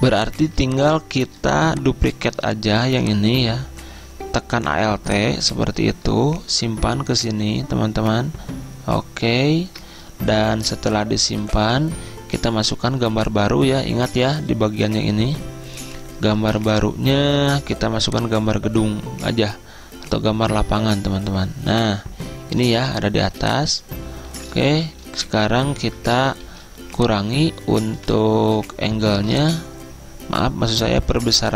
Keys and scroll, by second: 0.5 z, 11.5 Right, 16.5 alt+Tab, 23.3 z, 24.4 ctrl+z, 24.9 z, 26.1 Return, 26.6 z, 28.0 v.